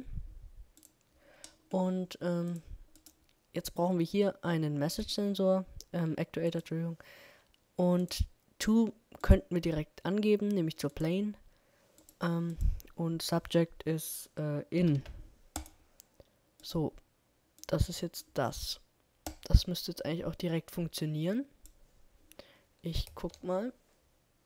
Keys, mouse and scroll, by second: 22.7 KP_0, 23.2 middle click, 24.2 middle click, 24.4 p.